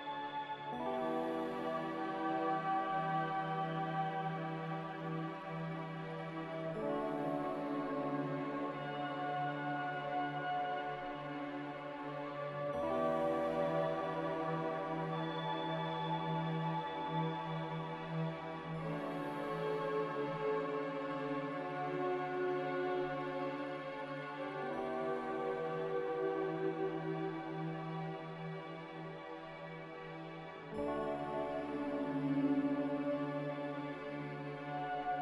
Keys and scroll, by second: 12.0 n, 15.6 z, 24.4 z, 24.9 a, 28.4 ctrl+z, 30.9 ctrl+z, 31.2-31.9 typing, 33.6-34.5 typing.